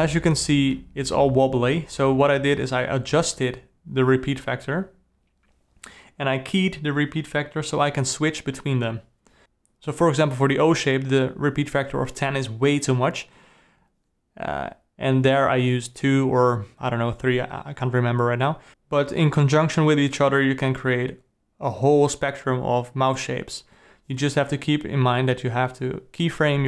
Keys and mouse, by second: 0.8 i, 4.8 click, 5.9 a, 9.7 click, 10.4-13.9 drag, 14.4 click, 14.8 s, 15.9 click, 16.2 s, 17.2 g, 18.4 click, 20.2-22.3 drag.